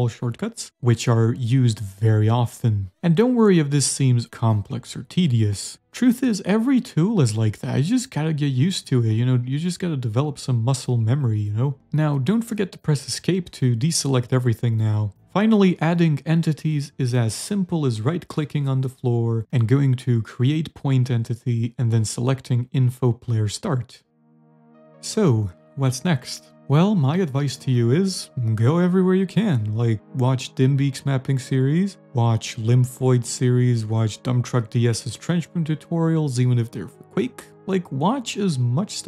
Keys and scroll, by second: 2.6 a, 3.9 ctrl+z, 4.3 d, 6.7 a, 13.5 v, 14.1 Escape, 14.5 w, 14.9 d, 16.3-18.0 typing, 24.3 a, 27.0-28.0 typing, 29.0-30.0 typing, 37.6 d, 38.7 s.